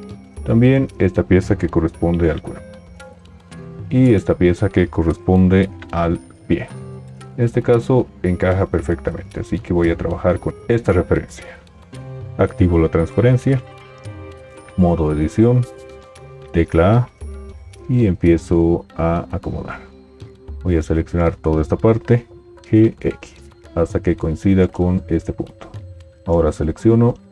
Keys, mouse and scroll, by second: 1.5 g, 5.7 g, 12.2 alt+z, 14.8 Tab, 16.5 a, 22.6 g.